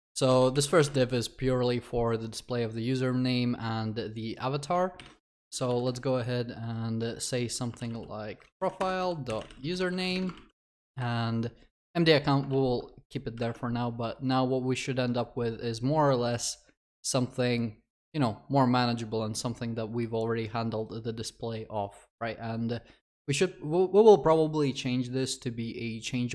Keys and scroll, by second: 0.5 ctrl+y, 8.8 Return, 10.3 ctrl+s.